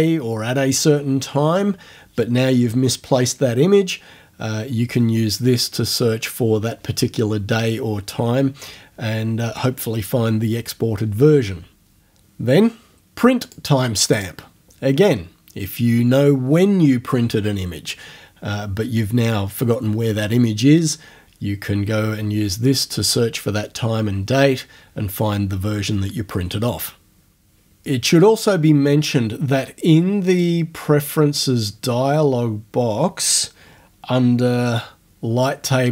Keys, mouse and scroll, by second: 13.5 click, 14.2 click, 30.3 click.